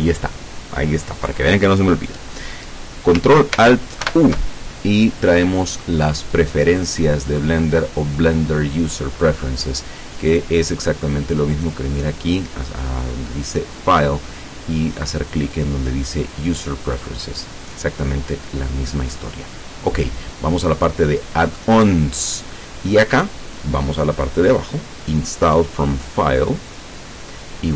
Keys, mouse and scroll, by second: 4.1 ctrl+alt+u, 10.4 click, 11.6 click, 16.9 click, 18.4 click, 20.8 click, 26.7 click.